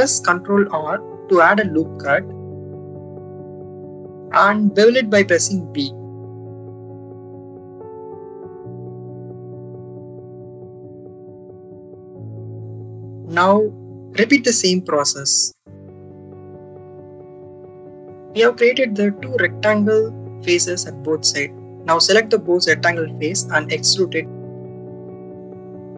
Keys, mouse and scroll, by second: 0.5 ctrl+r, 3.4 ctrl+r, 5.2 right click, 5.8 ctrl+b, 11.4 click, 12.6 ctrl+r, 14.5 ctrl+b, 17.8 click, 19.8 click, 22.7 shift+click, 23.8 e, 25.5 click.